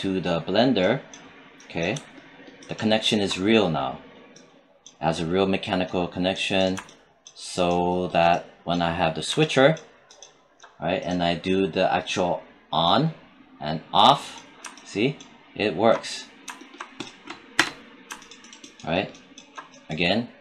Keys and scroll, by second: 17.4 space.